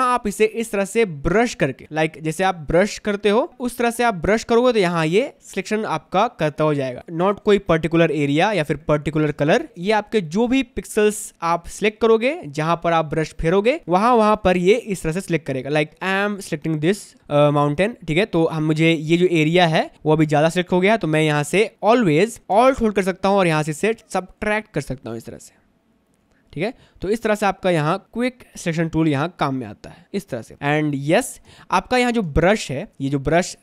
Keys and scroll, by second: 7.9 space, 13.8 space, 15.9 ctrl+z, 18.8 space, 31.6 space.